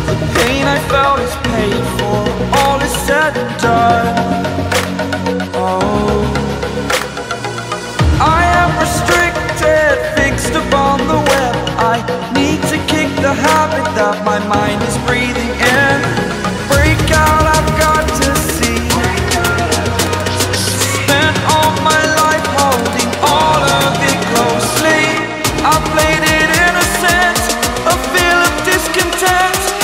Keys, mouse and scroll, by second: 0.4-0.8 scroll down 1, 0.8 scroll up 1, 1.8 click, 2.0 scroll down 1, 2.2 scroll up 1, 2.8 click, 3.1-4.0 scroll up 1, 4.0 click, 4.2 scroll down 1, 5.2 scroll up 1, 6.1 click, 6.5 scroll down 1, 7.2 click, 7.5 scroll down 1, 7.9 scroll up 1, 8.2 scroll down 1, 9.0 shift+click, 10.2 click, 12.6-13.0 scroll up 1, 14.5-15.1 scroll down 1, 17.9-18.3 scroll up 1, 18.5-19.1 scroll down 1, 19.9 Delete, 20.3-20.7 scroll up 1, 20.7-21.2 scroll down 2, 21.2 click, 21.7 ctrl+z, 22.1-22.5 scroll up 1, 23.4 click, 24.9-26.1 typing, 26.7 click.